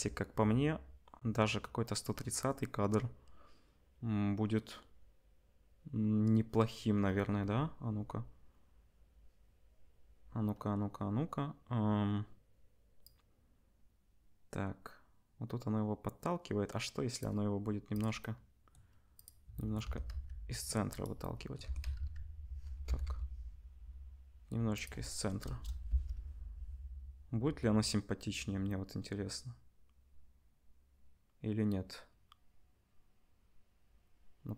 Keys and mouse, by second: 13.0-17.9 drag, 19.1 click, 19.8 r, 21.6 r, 25.4 KP_0, 26.2 space.